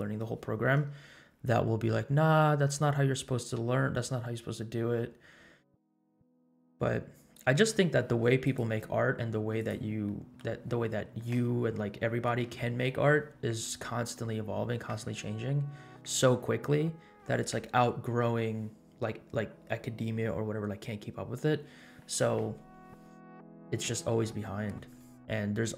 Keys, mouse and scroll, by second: 8.4 click, 8.8-9.3 scroll down 5, 9.5-10.0 drag, 10.2 middle click, 23.5 scroll down 3, 25.3-25.7 scroll down 4.